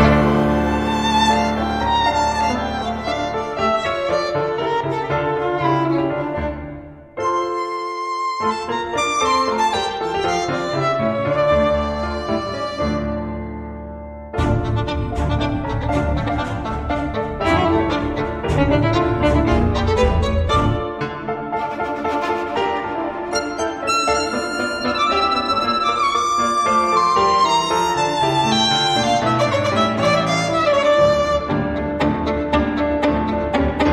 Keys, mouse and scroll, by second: 1.7-4.1 drag, 4.8 click, 5.7 ctrl+click, 7.8 click, 14.5-18.0 drag, 18.7 click, 21.5 click, 22.3 space, 23.1 space, 23.5 click, 25.5 click, 26.1 space, 27.4 click, 28.7 click, 30.8 click, 32.1 click, 33.1 click.